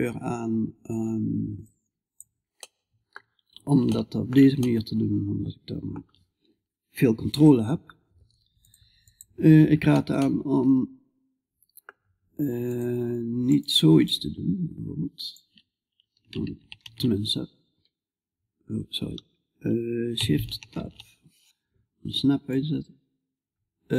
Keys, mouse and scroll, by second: 1.2 click, 2.1-4.4 middle drag, 4.8-8.6 middle drag, 8.6-9.6 drag, 9.6 middle click, 9.8-11.5 middle drag, 13.5-16.2 drag, 13.5-16.2 right drag, 16.2 shift+s, 22.0-23.9 drag.